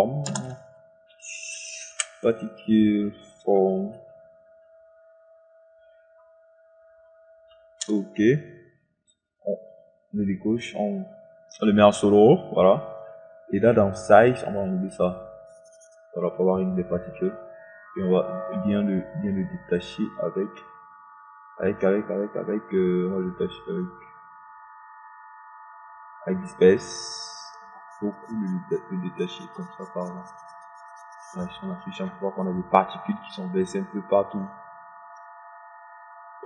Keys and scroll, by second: 0.5 Return, 8.0 Return.